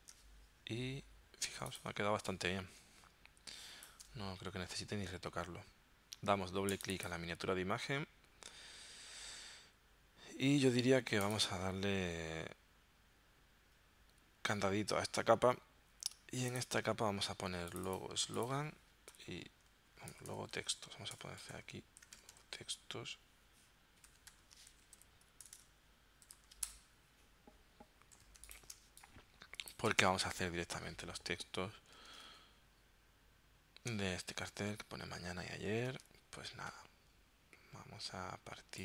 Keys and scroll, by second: 2.0 space, 19.3 -, 20.1 BackSpace, 20.7 BackSpace, 22.1 shift+t, 24.3-26.4 typing, 26.7 Return, 28.3 z, 28.8 space, 30.1 v, 32.3 super+Tab, 36.1 super+Tab.